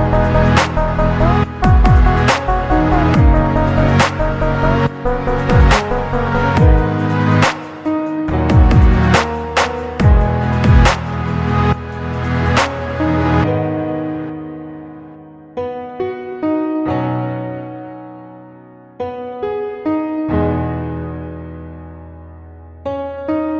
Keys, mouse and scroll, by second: 0.3 Tab, 1.8 a, 3.1 KP_1, 4.3-7.1 drag, 8.9 Tab, 9.3 click, 9.6-10.0 scroll down 2, 11.9-12.3 scroll down 1, 15.6 click, 16.9-17.3 scroll down 1, 17.3-18.2 middle drag, 18.5 shift+a, 23.4-23.5 drag.